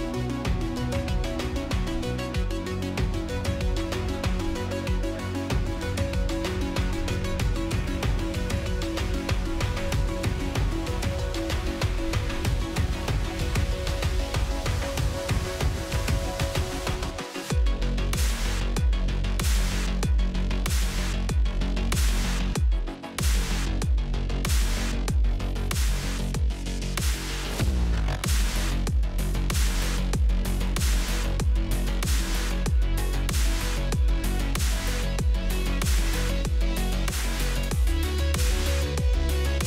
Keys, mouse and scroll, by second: 0.1-3.2 drag, 3.2 middle click, 3.4-4.9 drag, 5.4-6.4 drag, 6.4-7.4 middle drag, 7.4 click, 7.9 Tab, 8.3 Tab, 9.1-9.6 drag, 9.6 scroll down 1, 9.8-10.5 middle drag, 10.5 s, 12.3 KP_1, 12.9 g, 14.3-15.0 middle drag, 15.0 click, 15.7-18.7 drag, 19.3 scroll up 3, 19.6-19.9 shift+middle drag, 19.9 scroll down 3, 20.1 middle click, 20.7 scroll up 2, 20.9-21.6 shift+middle drag, 21.6 click, 22.1 click, 23.2 scroll down 1, 23.3 middle click, 24.1 shift+a, 26.0 g, 26.0 z, 26.4 g, 27.7 click, 28.2 click, 29.2-31.6 drag, 31.6-32.0 shift+middle drag, 32.2 scroll up 1, 32.4-35.5 middle drag, 35.9-36.2 scroll up 3, 36.2 click, 36.8 scroll down 1, 37.0-37.4 shift+middle drag, 37.4 click, 37.5 x, 38.1 shift+a, 38.3 BackSpace.